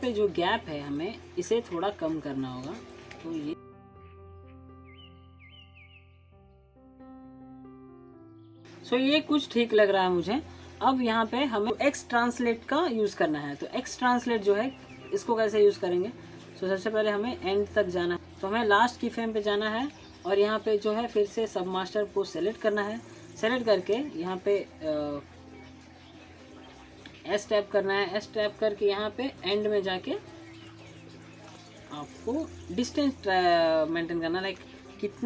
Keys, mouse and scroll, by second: 2.5 click, 3.6 scroll up 1, 3.6 alt+middle click, 3.7 alt+scroll down 2, 3.8 click, 3.9 shift+middle click, 4.0 click, 4.1 shift+middle click, 4.5 scroll up 2, 4.6 alt+middle click, 4.7 alt+middle click, 4.8 shift+middle click, 5.1 middle click, 5.1 middle click, 5.4 scroll down 1, 5.5 alt+middle click, 5.6 click, 6.0 middle click, 6.2 click, 6.3 shift+middle click, 6.5 click, 6.7 middle click, 6.9 click, 7.0 scroll down 1, 7.0 click, 7.1 scroll up 1, 7.4 alt+middle click, 7.5 click, 11.7 alt+middle click, 15.8-16.4 scroll up 1, 18.1 click, 19.0-21.0 drag, 22.6 alt+scroll up 1, 22.8 alt+click, 23.1 alt+middle click, 23.5 alt+scroll up 1, 23.7-24.3 alt+click, 24.9 click, 30.0 s, 30.8-32.0 drag, 32.5 scroll down 1, 32.8-33.4 alt+click, 33.5 alt+scroll up 1, 33.6 alt+middle click, 34.1 alt+click, 34.4-34.8 alt+scroll up 1.